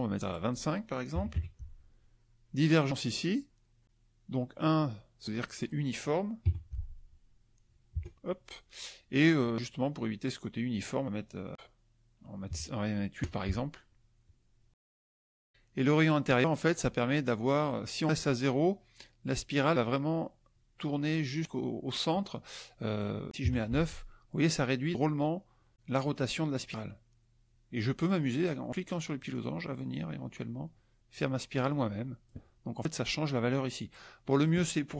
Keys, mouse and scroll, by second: 0.3 click, 1.3 KP_5, 5.5 click, 6.4 KP_1, 8.0 KP_Enter, 9.4 click, 12.5 KP_8, 13.1 KP_Enter, 22.9 click, 23.7 Tab, 25.9-28.2 drag, 29.2-32.4 drag, 33.9 click.